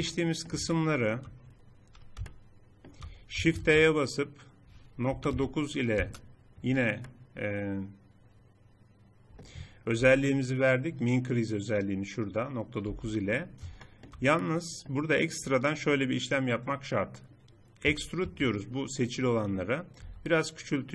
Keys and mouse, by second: 1.2-2.6 middle drag, 3.6 shift+e, 11.0 n, 13.0 n, 13.2 middle click, 14.8 middle click, 17.9 e, 20.0 s.